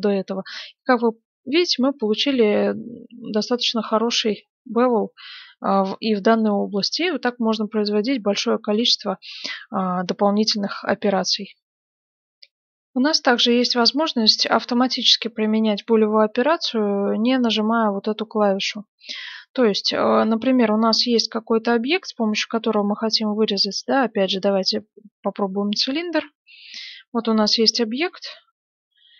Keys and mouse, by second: 3.8-5.7 middle drag, 6.2-12.0 middle drag, 12.0 F9, 14.4-16.6 middle drag, 18.3-22.2 middle drag, 20.1 shift+a, 22.5 s, 23.5 g, 25.1-26.1 middle drag, 26.1-28.3 drag.